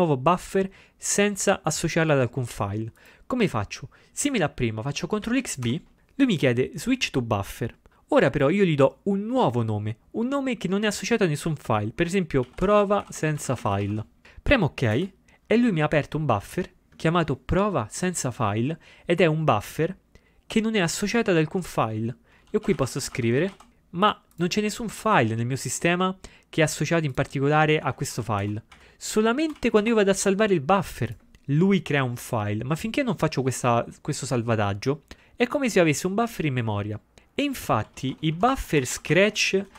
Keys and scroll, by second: 5.3 ctrl+x, 5.7 b, 12.5-14.4 typing, 22.4-24.0 typing, 27.8-30.4 typing, 38.1 ctrl+x, 38.2-39.7 typing.